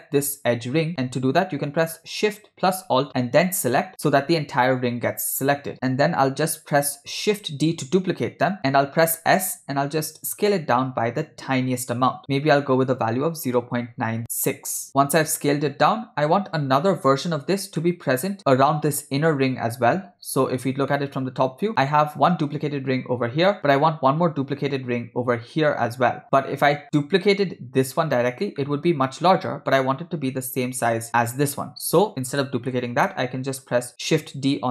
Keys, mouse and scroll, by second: 3.5 alt+shift+click, 7.7 shift+d, 14.9 shift+middle click, 17.9 middle click, 20.0 KP_7, 20.9 shift+middle click, 26.7 middle click, 28.6 middle click, 32.4 shift+middle click, 33.1 ctrl+middle click.